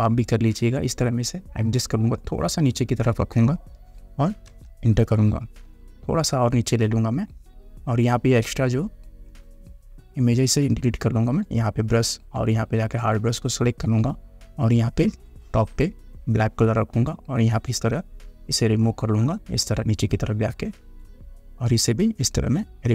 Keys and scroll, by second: 4.6 Return.